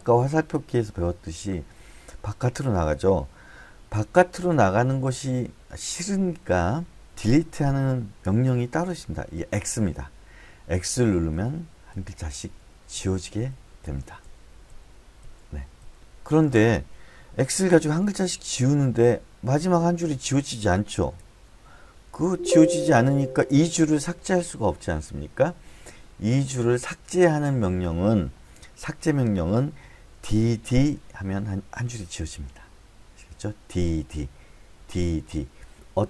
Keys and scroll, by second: 9.6 x, 11.3-15.8 typing, 17.5-20.1 typing, 21.2 BackSpace, 22.2 Escape, 22.6 j, 30.1 d, 30.6 d.